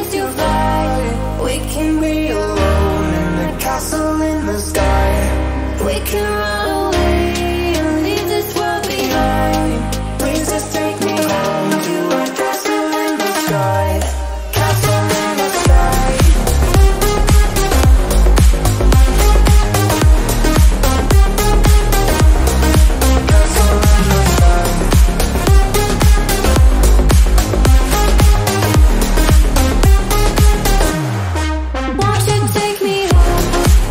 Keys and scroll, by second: 3.1 ctrl+t, 10.6 t, 15.1 t, 17.7-20.2 typing, 21.2 Return, 21.8-24.1 typing, 27.2 ctrl+t.